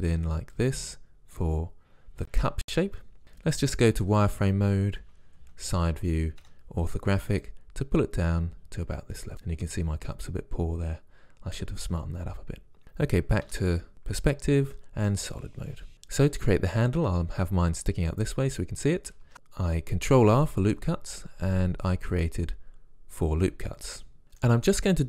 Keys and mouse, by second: 4.0 z, 5.4 KP_1, 6.4 KP_5, 13.4 KP_5, 14.7 z, 19.2 ctrl+r, 24.2 a, 24.4-25.0 drag.